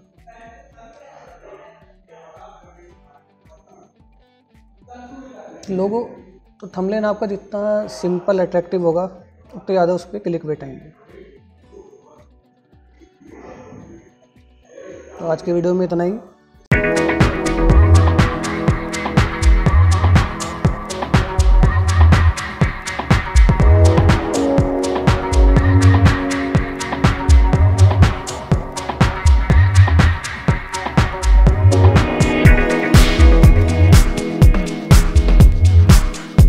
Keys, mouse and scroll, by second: 0.7 click, 11.6 scroll up 1, 12.8 click.